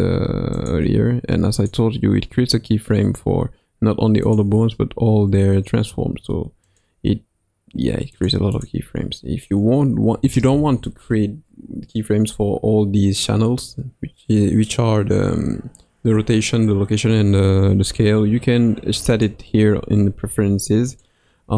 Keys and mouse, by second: 0.5-1.6 drag, 4.2 click, 6.6 click, 8.1 click, 8.5 click, 19.1-21.1 drag.